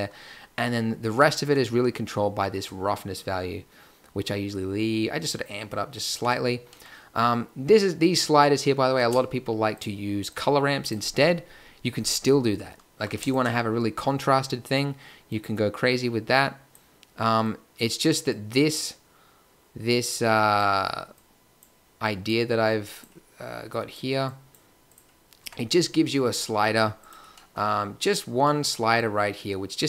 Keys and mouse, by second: 1.8-2.6 middle drag, 3.2 middle click, 5.1 middle click, 5.6 middle click, 8.9 shift+a, 25.4 Tab.